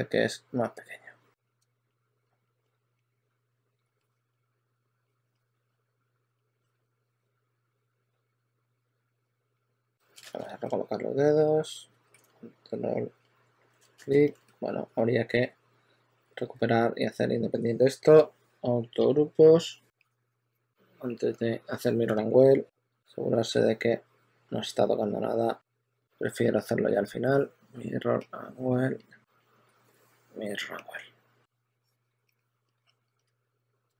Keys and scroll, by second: 1.0-4.0 typing, 6.5-10.5 typing, 10.1 super+a, 11.8 w, 14.0 super+a, 14.6 q, 16.4 shift+f, 16.8 shift+f, 22.0 s, 22.8 s, 33.3 w.